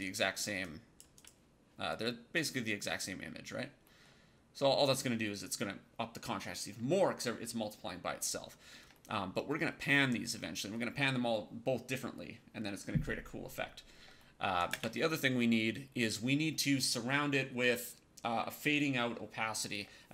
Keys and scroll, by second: 14.6 space.